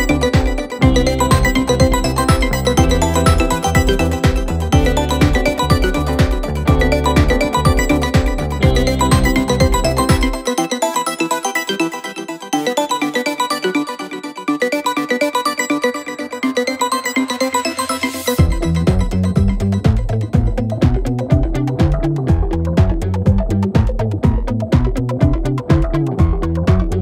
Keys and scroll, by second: 0.0 shift+l, 0.2 shift+e, 0.3 shift+g, 0.4 Return, 5.7 shift+k, 5.9 shift+e, 6.0 Return, 7.0 p, 7.7 p, 8.9 F1, 10.4 ctrl+d, 10.4 Escape, 13.3 p, 15.0 F1, 15.4 ctrl+d, 17.1 shift+a, 17.2 shift+m, 17.3 Return, 17.7 F1, 17.9 F2, 20.5 F1, 20.6 F2, 22.7 F1, 23.0 F2.